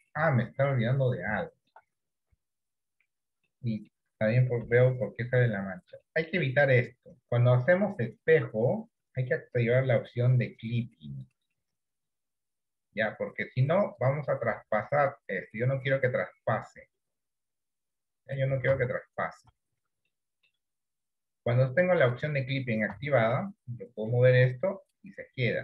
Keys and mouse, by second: 1.5 shift+middle click, 2.5 KP_1, 3.6 middle click, 4.8 KP_7, 6.1 middle click, 8.3 click, 10.7 click, 10.9 click, 11.5 click, 12.1 click, 14.8-18.3 drag, 18.8 ctrl+z, 20.2 shift+middle click, 22.1 click, 23.0 shift+middle click, 24.2 click.